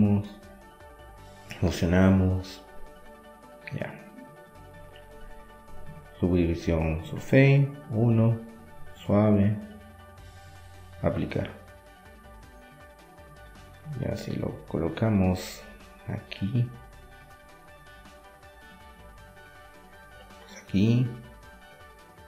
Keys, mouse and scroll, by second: 2.2 click, 2.7-3.8 middle drag, 3.9 middle click, 4.4-6.2 drag, 6.2 middle click, 6.8 KP_1, 11.4-13.5 drag, 13.8-18.5 middle drag, 18.9 r, 21.4-22.2 middle drag.